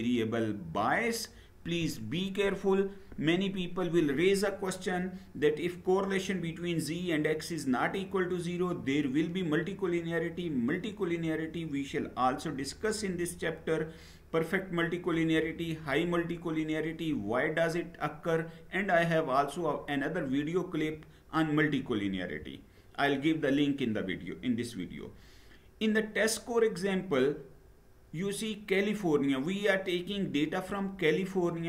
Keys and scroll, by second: 22.1 Down.